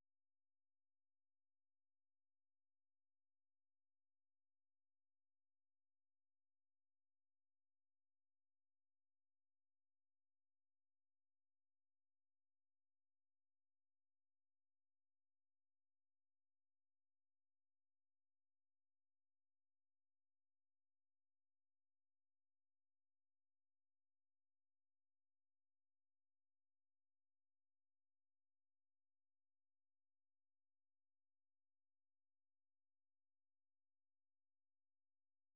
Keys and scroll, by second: 8.5-10.3 typing, 12.2-14.3 typing, 14.8 Return, 15.7 alt+Tab, 17.9 Down, 18.2 Down, 18.5 Down, 19.0 Down, 19.3 Down, 19.6 Down, 20.4 Down, 21.7 Down, 22.6 Down, 23.1 Down, 23.4 Down, 24.2 Down, 25.0-25.9 Down, 26.4 Home, 26.7-27.4 typing, 27.7 Down, 32.9 alt+Tab, 33.4-35.5 typing.